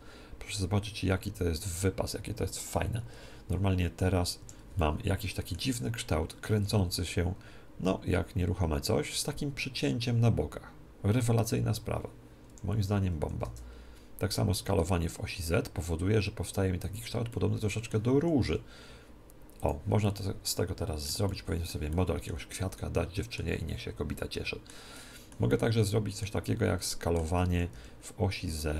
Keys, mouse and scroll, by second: 4.7-7.6 middle drag, 6.5 r, 13.1 s, 16.8-18.6 drag, 17.2 middle click, 18.1 s, 18.6 middle click, 19.6-21.4 drag, 21.4 middle click, 21.4-24.3 drag, 27.5 s, 28.3 middle click.